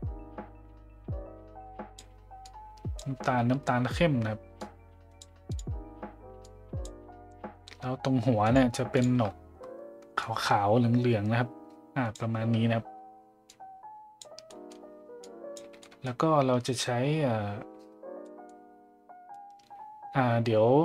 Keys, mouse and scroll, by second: 4.6 click, 5.5 click, 8.4 click, 9.0 click, 13.5 click, 14.6 middle click, 15.3 click, 15.8 middle click, 18.3 middle click.